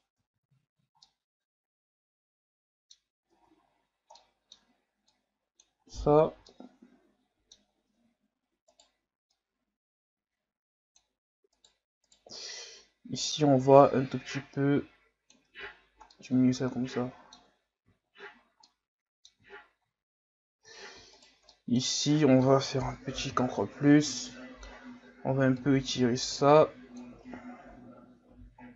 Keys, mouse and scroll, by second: 0.2 Tab, 0.8 scroll down 1, 1.1-3.0 middle drag, 3.0-3.4 scroll up 2, 3.4 Tab, 4.2 middle click, 5.1 click, 5.8 Tab, 6.2 scroll down 1, 6.5-7.6 middle drag, 7.6-8.0 scroll up 2, 8.0 Tab, 8.7 right click, 9.4-11.6 drag, 11.6 right click, 12.0 right click, 12.6-15.5 drag, 15.5 Tab, 15.7 scroll down 3, 16.1-17.7 middle drag, 17.7 scroll up 2, 18.4 scroll up 1, 18.7-19.3 middle drag, 19.3-20.5 scroll up 3, 20.5 Tab, 21.1 alt+right click, 21.5-22.9 middle drag, 22.9 ctrl+KP_Add, 23.3 ctrl+KP_Add, 24.2-25.6 middle drag, 25.6-27.3 drag, 27.3 Tab, 27.7 a, 28.0 scroll down 3, 28.3 a.